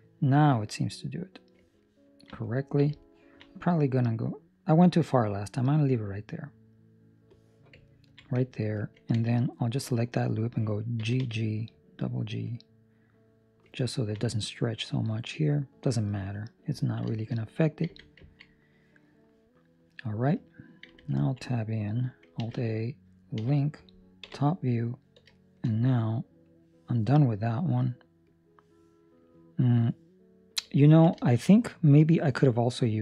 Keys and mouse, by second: 1.8 ctrl+middle click, 2.6 ctrl+middle click, 3.0 ctrl+middle click, 4.0 click, 7.8 ctrl+middle click, 9.5 alt+right click, 10.9 g, 13.9 ctrl+middle click, 14.3 middle click, 15.2 middle click, 15.5 ctrl+middle click, 16.7 ctrl+middle click, 16.9 ctrl+middle click, 17.1 shift+middle click, 17.3 middle click, 17.8 Tab, 18.3 ctrl+middle click, 18.4 middle click, 19.0 middle click, 20.8 Tab, 21.3 ctrl+middle click, 22.3 alt+a, 24.2 l, 24.2 KP_7, 25.3 shift+middle click, 26.4 click, 30.7 ctrl+middle click, 31.1 shift+middle click, 31.9 click.